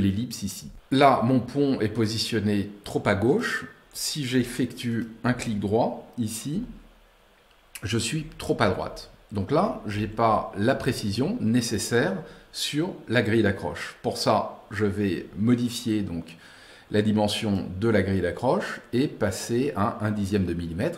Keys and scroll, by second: 6.9 Right, 8.0 Left, 8.5 Right, 8.7 Left, 9.4 Right, 9.8 Left, 10.6 Right, 10.9 Left.